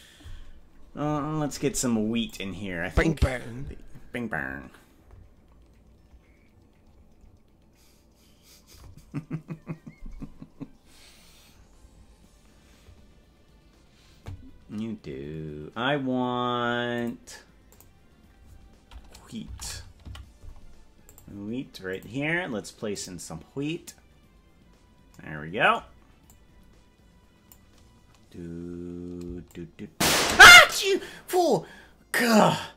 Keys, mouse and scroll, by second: 2.3 click, 6.5-7.5 scroll down 15, 17.0 click, 17.8-21.2 drag, 22.1 click, 23.0-24.5 drag, 26.3-28.6 drag, 29.5 shift+click.